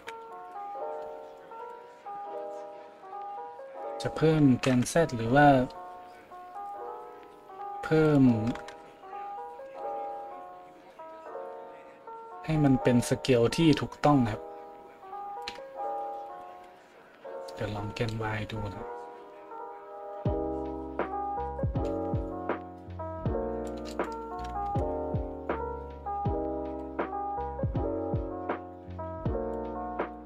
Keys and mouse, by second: 23.8 middle click.